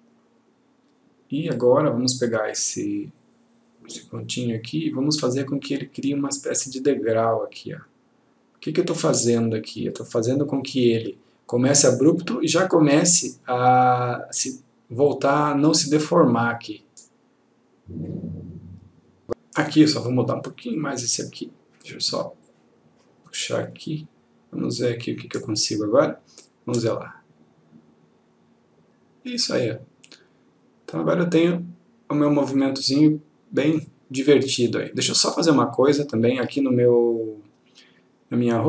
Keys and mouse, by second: 15.2 click, 20.9 click, 22.6-25.7 click, 35.0 click.